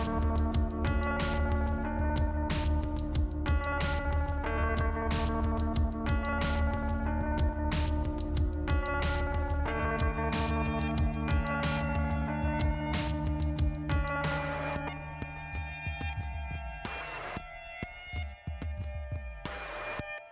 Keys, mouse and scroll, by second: 4.4 click, 4.5 click, 4.7 right click, 5.6 m, 6.8 click, 7.1 m, 7.6 right click, 8.7 click, 9.7 click, 10.8 click, 11.7 click, 12.7 click, 13.4 click, 14.2 click, 15.3 click, 16.2 p, 16.6-17.1 scroll down 2, 19.0 click.